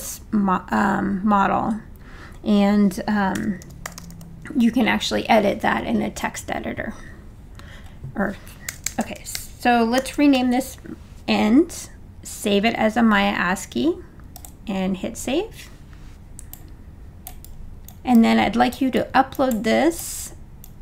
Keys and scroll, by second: 3.3 b, 6.1 n, 8.7 BackSpace, 9.7-10.6 typing.